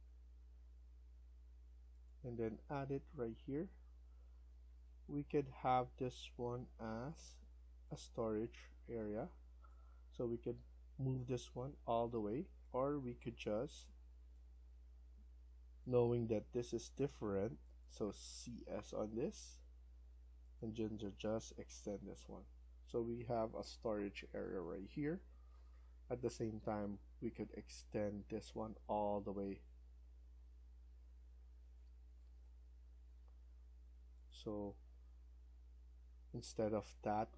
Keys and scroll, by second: 2.4 Escape, 2.5-3.3 typing, 3.4 Escape, 10.1 Escape, 10.3 Escape, 12.1 Escape, 15.8 Escape, 16.1 Escape, 17.2 Escape, 18.7-19.6 typing, 21.8 Escape, 22.0 Escape, 32.1 Escape, 32.4 Escape, 35.9 Delete.